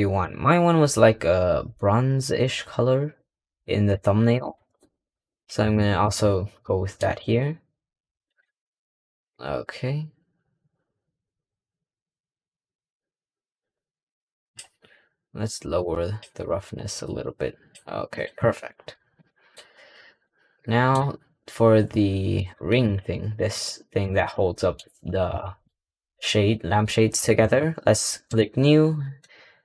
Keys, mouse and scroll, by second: 4.2 click, 4.6-5.0 scroll down 3, 5.0-5.6 scroll up 3, 5.6-6.0 shift+middle drag, 6.0-6.5 shift+scroll up 2, 6.5-7.1 middle drag, 7.1 click, 8.1 click, 15.7 click, 16.3-18.1 drag, 18.3 scroll down 3, 18.6-19.4 middle drag, 19.4-20.1 scroll up 3, 20.1-20.8 middle drag, 20.8-22.2 scroll down 3, 22.2 click, 22.7 click, 23.4 g, 24.2-24.6 middle drag, 24.6-25.2 scroll up 3, 25.2-25.6 shift+middle drag, 25.6-27.9 shift+scroll up 2, 28.1-29.4 drag, 29.4-29.6 scroll down 3.